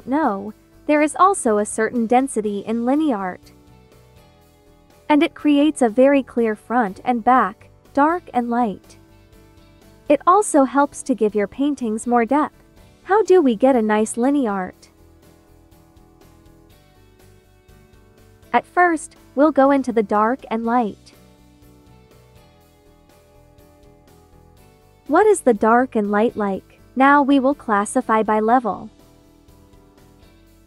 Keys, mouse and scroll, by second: 14.3 space, 14.7 click, 14.9 space, 17.4 click, 17.4 click, 17.7 space, 21.8-23.9 drag, 25.0 space, 25.2 click, 25.5 space, 27.8-30.2 drag.